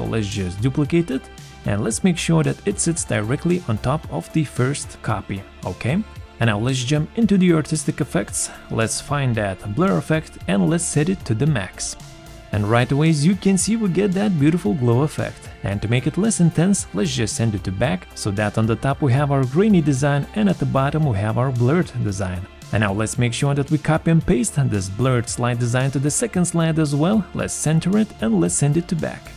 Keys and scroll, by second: 0.0 ctrl+d, 23.2 ctrl+c, 24.2 ctrl+v.